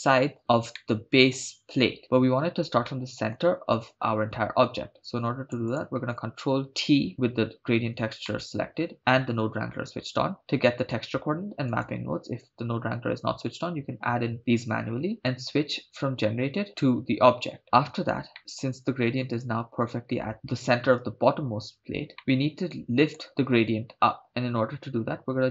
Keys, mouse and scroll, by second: 0.4 KP_0, 0.7-1.3 middle drag, 2.9-3.4 middle drag, 5.0 click, 5.7 click, 7.1 ctrl+t, 8.3 middle click, 10.8 click, 11.7 click, 15.5-16.7 drag, 18.4 middle click, 22.2-23.2 middle drag, 24.5-25.5 scroll up 6.